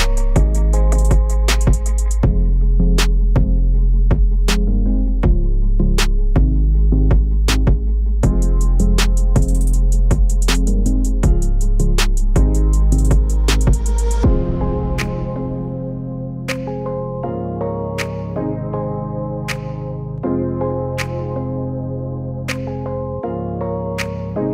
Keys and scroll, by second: 3.9 space, 4.4 space, 4.9 space.